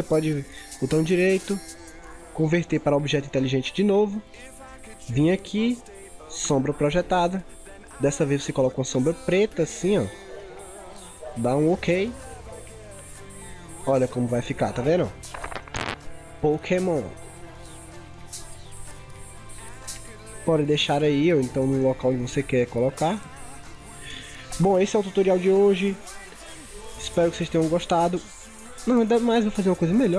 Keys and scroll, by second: 13.2 ctrl+0, 13.4 ctrl+=, 13.8 ctrl+0.